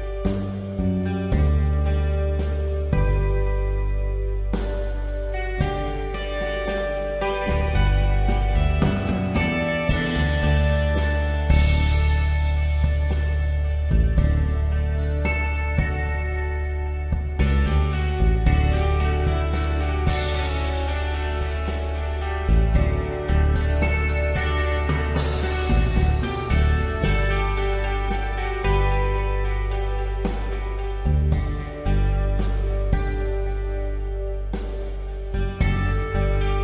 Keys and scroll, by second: 1.6 b, 3.9-4.5 typing, 9.8 ], 12.1 ctrl+z, 23.6 alt+shift+Delete.